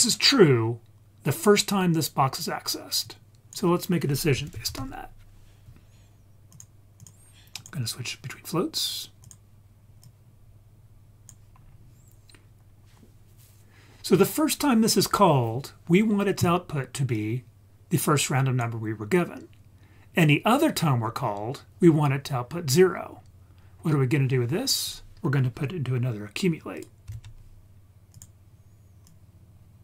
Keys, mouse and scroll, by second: 1.9 click, 3.0-6.6 drag, 7.0 click, 7.6-9.3 drag, 10.0-11.3 drag, 11.6-12.6 scroll down 2, 12.6-13.1 scroll up 4, 17.1-18.6 drag, 22.4-23.1 scroll down 3, 23.1-23.7 scroll down 2, 23.6-24.1 scroll up 3, 24.9 click, 26.8 click, 27.1 shift+d, 28.1 click, 29.1-29.8 drag.